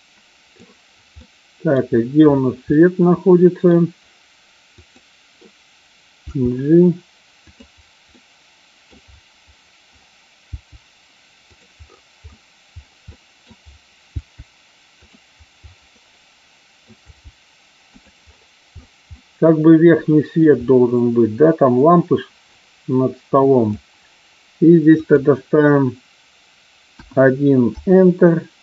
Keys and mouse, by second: 1.1 middle click, 2.7-3.7 middle drag, 4.8 click, 6.3 g, 7.4 click, 8.1-8.8 middle drag, 10.3 g, 13.1-13.4 middle drag, 14.2 g, 15.9-16.8 middle drag, 16.9 g, 17.8 click, 19.1-20.3 middle drag, 21.9-23.7 drag, 24.9-28.1 drag.